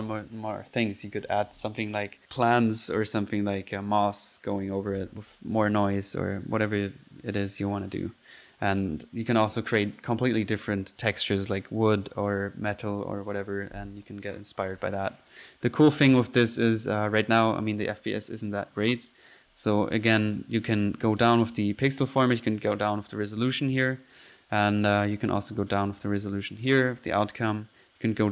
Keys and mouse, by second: 5.9-6.4 drag, 7.0 click, 7.4 click, 8.9 click, 16.1 click, 16.6 click, 18.5-20.1 middle drag, 20.1 click, 20.6 click, 23.6 click, 24.8 middle click, 25.9 click, 26.7-27.1 drag, 27.3-27.7 drag, 27.4 typing, 28.1-28.3 drag.